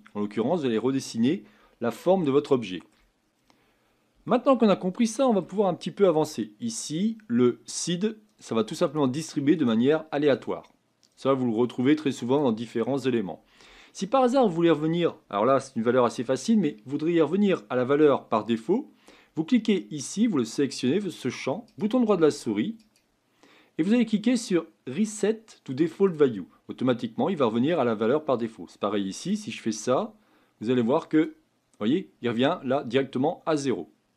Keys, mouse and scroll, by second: 0.9-1.9 scroll down 1, 2.2-7.8 shift+middle drag, 7.8-26.1 drag, 31.2-33.7 right drag, 33.7-34.1 drag.